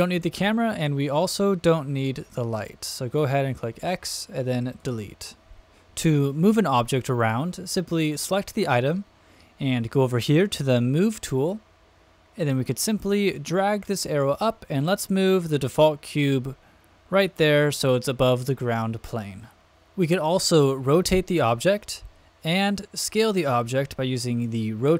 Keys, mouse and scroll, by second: 1.0 click, 1.9 x, 3.7 x, 8.1 click, 11.3 click, 13.3-17.2 drag, 20.8 click, 22.9 click, 24.3 click.